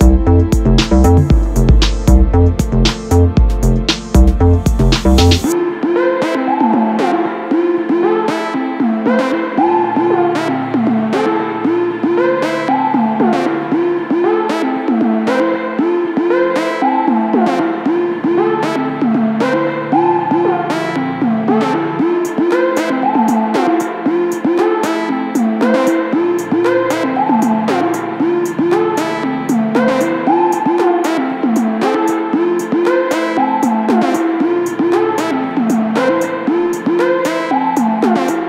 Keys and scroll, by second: 0.0 Left, 2.8 Left, 3.8 Up, 6.8 space, 8.6 e, 11.1 ], 15.8 ], 17.7 ctrl+z, 20.6 ctrl+z, 25.8 ], 28.5 ctrl+z, 29.3 [, 36.4 ].